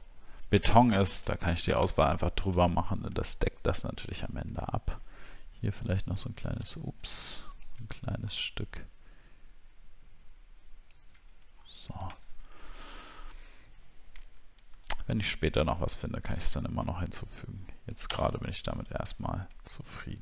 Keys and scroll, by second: 3.2-4.1 alt+scroll down 1, 4.2-5.1 alt+scroll up 1, 11.6-12.1 alt+scroll down 1, 19.2 alt+scroll down 1.